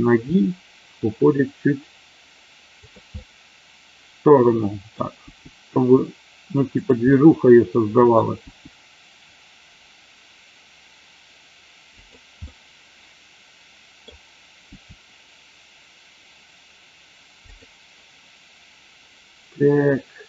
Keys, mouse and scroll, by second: 0.2 g, 2.7 click, 3.1-4.8 middle drag, 7.0-8.1 middle drag, 8.4 g, 11.9 click, 12.5 scroll up 1, 12.6-14.0 middle drag, 14.0 scroll down 1, 14.6 g, 17.5 click.